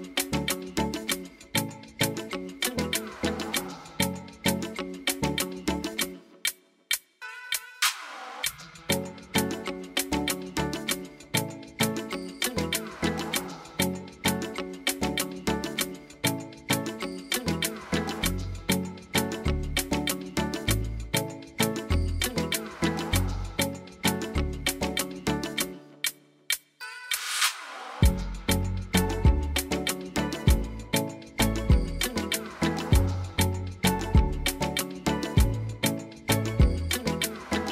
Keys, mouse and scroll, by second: 1.3 click, 1.7 click, 3.2 click, 5.5 click, 6.0 click, 7.5 click, 8.9 click, 15.0 click, 15.4-17.3 drag, 18.0 click, 19.2 click, 19.8 click, 20.1 click, 35.5 click, 36.0 click, 37.1 click, 37.4 click.